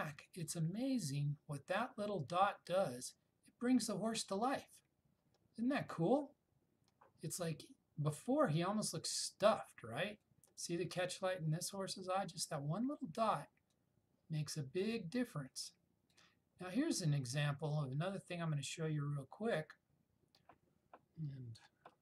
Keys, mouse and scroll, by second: 8.7-10.5 click, 13.8-16.3 click, 18.3-19.8 click.